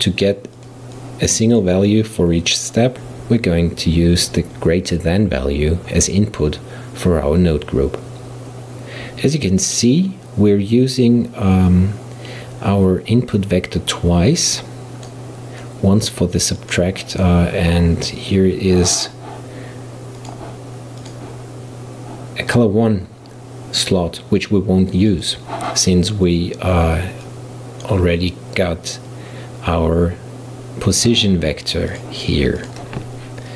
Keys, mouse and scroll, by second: 0.6-6.6 drag, 13.4 click, 15.6 click, 16.6 click, 20.2 click, 21.1-24.1 drag, 25.1 click, 27.3 click, 31.9 click, 32.6-33.5 drag.